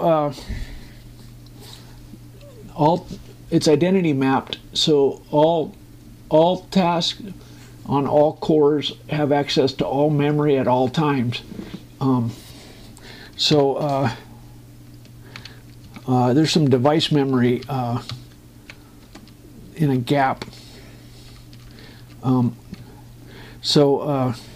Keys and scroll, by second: 17.6 Up, 18.9 Down, 19.8 space, 23.0 space.